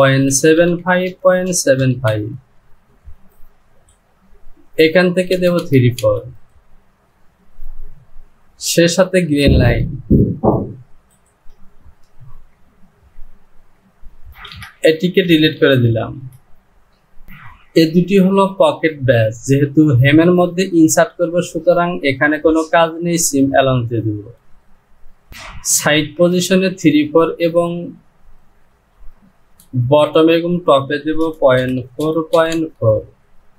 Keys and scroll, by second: 1.8 KP_5, 2.1 Down, 5.4 Down, 5.5 Down, 14.5 shift+z, 25.3 Down, 29.4 Down.